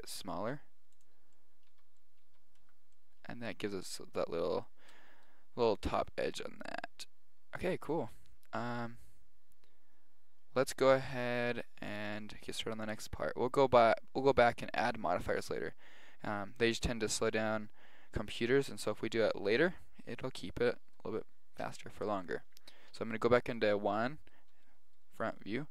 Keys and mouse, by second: 1.4-5.4 middle drag, 1.8 z, 2.3 z, 2.7 Tab, 7.9-10.7 middle drag, 10.9-12.8 middle drag, 13.2-15.2 middle drag, 22.3-24.2 middle drag.